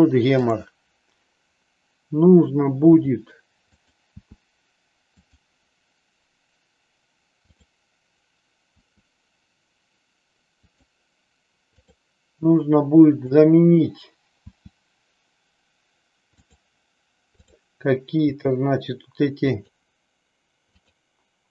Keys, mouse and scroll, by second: 2.9 r, 4.0 r, 5.3 click, 7.6 click, 8.8 r, 11.7 click, 13.2 click, 14.4 r, 17.3 click, 18.3 r, 20.7 click.